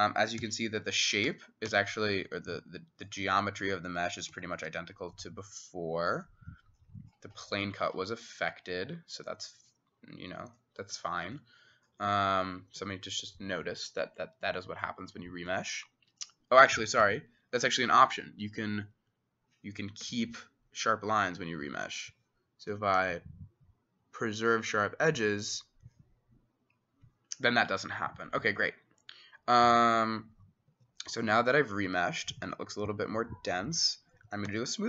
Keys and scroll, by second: 0.4 w, 1.3 w, 1.7 w, 3.3 Escape, 3.8 Escape, 4.4 w, 4.7 w, 11.4 typing, 12.8 w, 17.1 ctrl+z, 20.1 ctrl+z, 30.7 Escape, 34.5 ctrl+a.